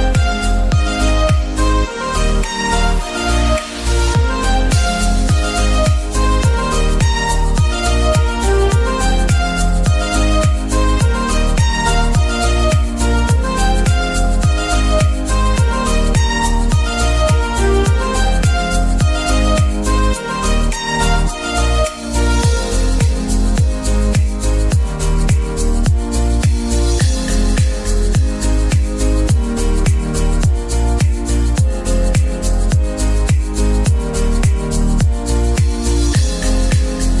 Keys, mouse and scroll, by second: 0.8 s, 2.6-3.9 middle drag, 3.9 click, 4.2 middle click, 5.1 e, 6.0 s, 7.3 s, 10.9 middle click, 11.4 click, 12.2 e, 12.9 middle click, 13.5 s, 15.7 s, 19.0 s, 20.8 middle click, 21.7 click, 22.5 s, 23.4 e, 26.5 s, 28.5 scroll down 3, 28.6 middle click, 29.6-30.1 scroll up 1, 30.1 middle click, 30.4-31.0 scroll up 1, 31.0 shift+middle click, 31.3 scroll up 1, 31.8 e, 33.3 shift+middle click, 33.8 click, 34.4 e, 35.9-37.2 shift+middle drag.